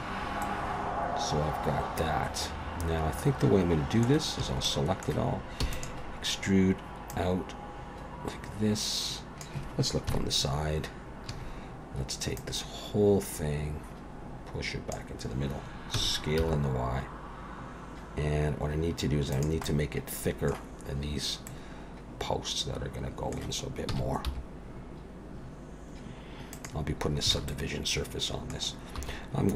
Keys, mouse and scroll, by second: 0.4 middle click, 4.4 a, 4.6 middle click, 5.6 e, 7.1 click, 10.1 KP_3, 11.3 a, 12.4 click, 15.9 s, 19.6 middle click, 21.5 middle click, 23.9 s, 27.3 alt+a, 27.5 middle click, 29.0 3.